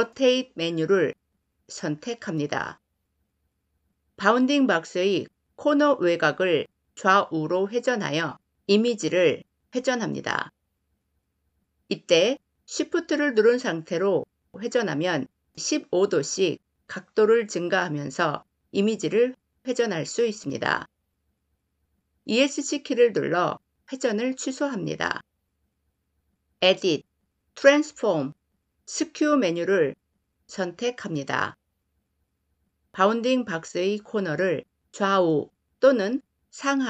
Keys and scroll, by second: 22.2 Escape.